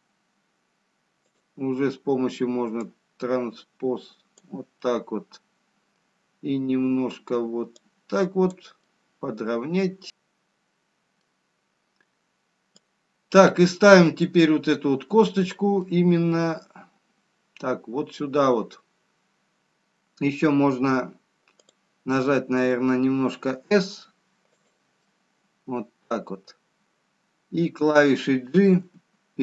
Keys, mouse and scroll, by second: 2.1 click, 4.1 click, 5.1 middle click, 9.1 click, 9.4 middle click, 10.0 click, 10.0-10.5 scroll down 1, 10.5 middle click, 13.5 click, 14.9-16.2 scroll up 4, 16.2 middle click, 16.2-16.7 scroll down 2, 19.3-21.5 scroll down 1, 24.4 click, 24.4 s, 25.4 middle click, 29.1 g.